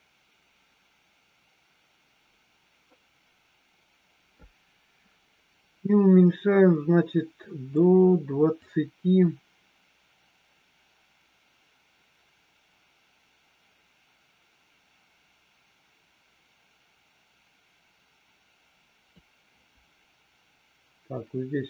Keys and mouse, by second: 8.6-19.2 drag.